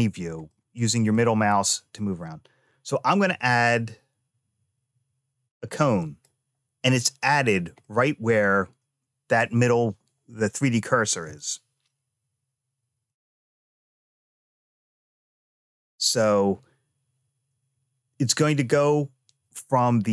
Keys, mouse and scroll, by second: 0.3 middle click, 3.0 shift+a, 7.6-9.2 middle drag, 9.2 scroll down 1, 19.8-20.1 scroll up 3.